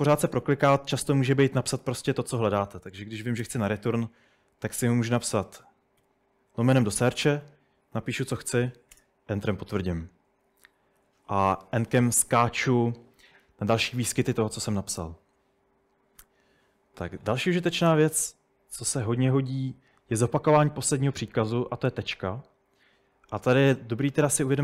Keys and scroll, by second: 0.0-0.7 typing, 1.9-3.2 typing, 3.5 Return, 6.1 /, 7.6-9.0 typing, 9.0 Return, 11.0 typing, 16.9 k.